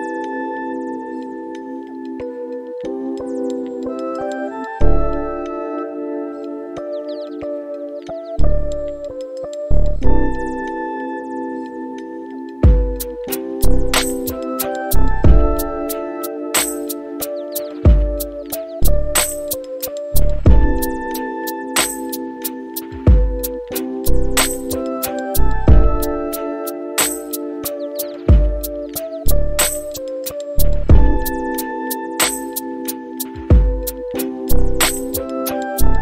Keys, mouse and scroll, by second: 1.8 click, 6.4 click, 10.8-13.9 drag, 14.6-16.9 drag, 18.3-24.6 drag, 24.9 middle click, 26.9-34.7 drag.